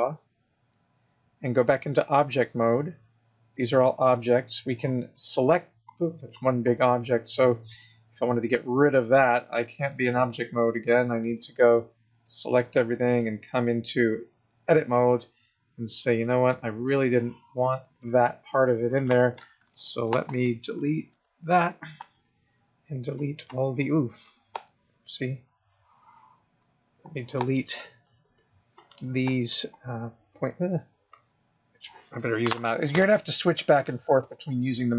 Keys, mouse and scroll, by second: 0.7 click, 4.0 click, 4.8 click, 6.1 click, 6.6 click, 6.9 click, 9.0 click, 10.7 click, 10.8 click, 12.0 click, 13.6 click, 16.0 click, 17.0 click, 21.3 x, 23.4 click, 25.7 click, 28.5 x, 30.0 click.